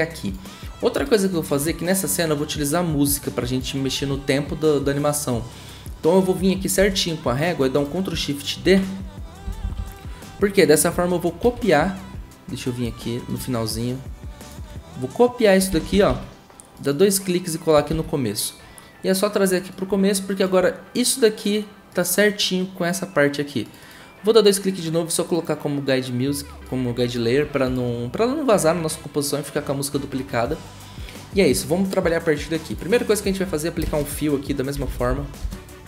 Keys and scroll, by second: 6.8 =, 8.6 ctrl+shift+d, 9.4 typing, 11.4 ctrl+c, 15.7 ctrl+c, 15.9 ctrl+c, 16.5 ctrl+c, 17.9 ctrl+v, 34.5-35.6 typing.